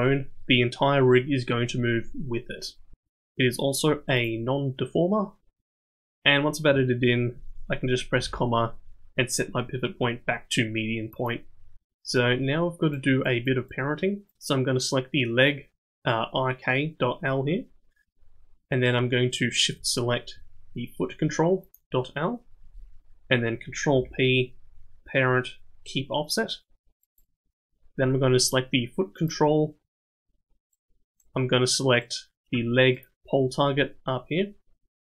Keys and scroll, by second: 23.9 ctrl+p.